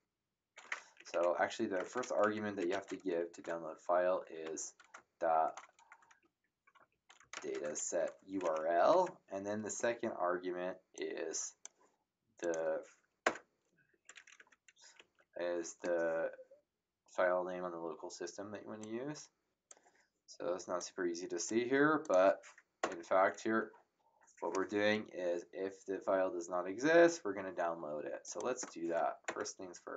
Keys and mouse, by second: 1.0 ctrl+Left, 1.7 ctrl+Right, 2.5 Left, 3.6 ctrl+v, 4.4 ctrl+z, 5.3 shift+', 6.2 ctrl+v, 6.9 shift+', 7.2 ,, 7.3 space, 7.7 shift+', 8.9 Home, 10.9 click, 12.4 click, 13.2 Return, 13.9 Up, 14.4 Home, 14.9 Left, 18.8 click, 20.8 click, 22.0 click, 22.8 Return, 28.2 click, 29.2 Return.